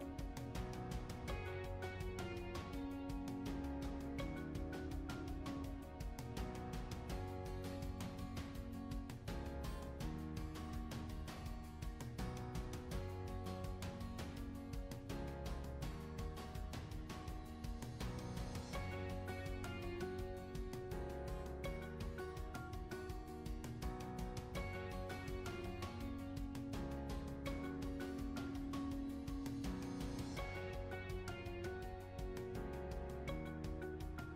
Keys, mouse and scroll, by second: 0.0-0.1 typing, 0.0 alt+middle click, 0.5 alt+click, 0.5 alt+middle click, 0.6 alt+click, 1.0 alt+middle click, 1.0 alt+click, 1.1 alt+middle click, 1.2 alt+click, 1.4 alt+click, 1.6-3.6 typing, 1.7 alt+click, 2.0 alt+click, 2.2 ctrl+z, 2.2 alt+click, 2.4 click, 2.6 shift+click, 2.7 alt+middle click, 2.8 alt+click, 3.0 ctrl+r, 3.2 shift+right click, 3.4 alt+middle click, 3.4 alt+click, 3.6 alt+click, 4.3 shift+click, 4.9 alt+click, 5.2 shift+click, 5.3-10.1 typing, 5.3 alt+middle click, 5.7 alt+middle click, 6.0 alt+shift+click, 6.1 shift+right click, 6.3 click, 6.3 alt+middle click, 6.4 alt+click, 7.3 alt+click, 7.6 alt+click, 7.6 scroll up 2, 7.7 alt+middle click, 7.7 ctrl+z, 7.8 click, 8.2 alt+click, 8.3 alt+middle click, 8.3 click, 8.6 alt+click, 8.8 scroll up 1, 9.1 alt+click, 9.6 ctrl+z, 10.2 alt+click, 10.4 alt+click, 10.4 alt+middle click, 10.7-11.3 alt+drag, 11.4 ctrl+r, 11.6 alt+click, 12.0 alt+middle click, 12.4-15.9 typing, 12.6 ctrl+z, 12.7 click, 13.3 alt+click, 13.4 scroll down 2, 13.4 ctrl+r, 13.6 scroll up 3, 13.7 shift+click, 13.9 alt+middle click, 14.0 alt+click, 14.1 alt+click, 14.4 ctrl+r, 14.6 click, 14.7 shift+click, 14.9 alt+click, 15.0 alt+click, 15.9 alt+click, 16.0 ctrl+right click, 16.3 alt+drag, 16.6 ctrl+shift+right click, 16.7 alt+click, 16.8-17.4 scroll up 3, 17.0 alt+click, 17.4-18.9 typing, 17.5 alt+click, 17.8 click, 17.9 alt+click, 18.0 alt+middle click, 18.1 scroll up 1, 18.3 drag, 18.5 alt+middle click, 18.6 alt+click, 19.0 alt+click, 19.2 alt+middle click, 19.3 alt+middle click, 19.5 ctrl+z, 19.7 alt+click, 19.9 alt+middle click, 20.1 scroll down 2, 20.2 alt+click, 20.3 alt+middle click, 20.3 scroll up 2, 20.4 alt+click, 20.4 scroll down 1, 20.5 2, 20.5 alt+click, 20.7 a, 20.7-21.1 alt+shift+drag, 21.1 Delete, 21.2 a, 21.3 alt+shift+click, 21.3 g, 21.5 alt+click, 21.6 alt+middle click, 21.7 alt+click, 22.4 alt+click, 22.5 scroll up 1, 22.7 alt+click, 22.9 alt+middle click, 23.4 alt+click, 23.5 a, 23.5 a, 23.6 alt+click, 23.9 a, 24.0 alt+middle click, 24.1 2, 24.1 alt+click, 24.5 shift+right click, 24.7 alt+click, 25.0 alt+click, 25.2 alt+middle click, 25.9-28.7 typing, 26.0 alt+click, 26.1 alt+middle click, 26.2 alt+click, 26.3 alt+middle click, 26.5 click, 27.1 alt+click, 27.3 alt+middle click, 28.1 alt+click, 28.2 ctrl+r, 28.4 alt+click, 28.7 click, 28.8 alt+click, 29.1 ctrl+r, 29.3 alt+click, 29.7 alt+click, 29.7 scroll up 2, 30.0-33.8 typing, 30.1 alt+click, 30.2 scroll down 3, 30.3 alt+middle click, 30.3 alt+click, 30.7 alt+click, 30.8 alt+click, 31.4 alt+click, 31.8 ctrl+r, 31.9 alt+click, 32.1 scroll up 1, 32.4 click, 33.3 alt+middle click, 33.4 alt+click, 33.5 ctrl+r, 34.3 alt+middle click.